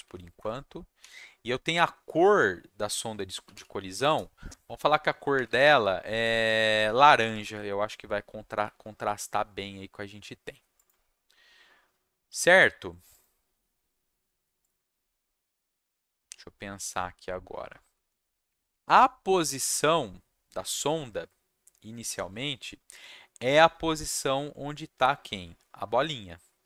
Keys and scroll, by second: 0.3 Return, 1.0 ., 3.2-5.3 typing, 6.5-7.8 typing, 17.8 Down, 18.0 Down, 18.1 Down, 18.4 Up, 18.8 Tab.